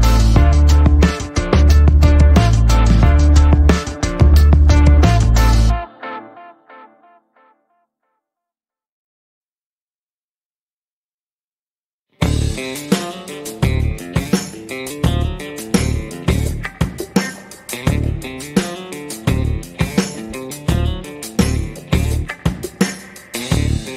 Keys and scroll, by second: 2.3 shift+a, 4.3 g, 6.8 s, 6.9 x, 12.3 g, 14.6 s, 14.8 y, 17.7 g, 21.7 g, 21.9 x.